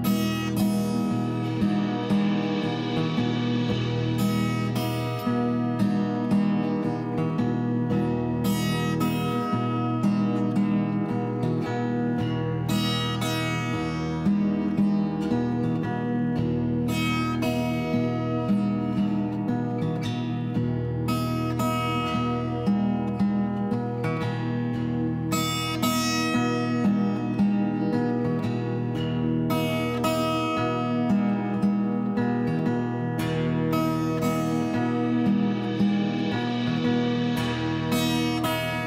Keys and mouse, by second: 0.1 click, 1.2 click, 4.3 click, 4.7 0, 6.4 click, 7.3 r, 7.9 click, 8.1 click, 8.8 x, 9.0 click, 9.7 click, 11.8 click, 12.0 click, 12.5 click, 17.8 g, 18.9 click, 19.5 click, 20.1 g, 20.3 z, 22.7 click, 23.0 middle click, 23.8 click, 24.1 middle click, 25.0 click, 25.5 shift+g, 25.6 z, 26.3 click, 27.0 click, 27.7 r, 29.0 click, 29.4 click, 30.2 r, 31.6 click, 31.8 s, 33.5 click, 34.0 click, 34.8 s, 35.8 click, 36.2 r, 37.0 click, 38.0 click, 38.5 r, 38.5 s.